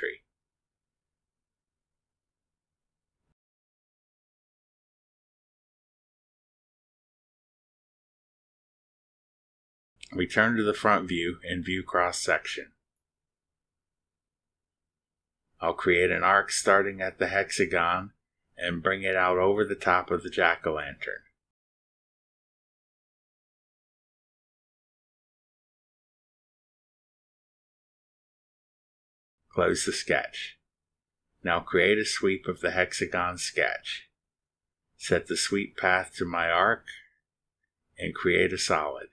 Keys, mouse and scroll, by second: 0.0 click, 3.0 click, 5.7 click, 7.4 drag, 10.0 click, 12.9 click, 14.6 click, 19.2 click, 23.0 click, 25.5 click, 26.8 click, 27.4-28.5 middle drag, 27.5 click, 29.6 click, 32.3 click, 34.4 click, 35.1 click, 35.6 click, 36.2 click, 37.2 click, 38.5 click.